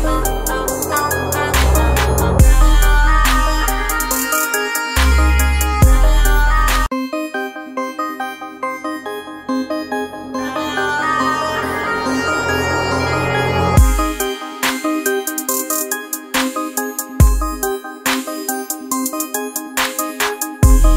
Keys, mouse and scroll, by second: 0.8 ctrl+space, 0.9 ctrl+click, 1.3 ctrl+space, 3.0 click, 4.5-7.7 shift+drag, 8.9 alt+scroll down 1, 9.3 space, 9.4 click, 9.9 ctrl+click, 10.5 typing, 12.4 ctrl+space, 12.5-20.9 ctrl+drag, 13.3 typing.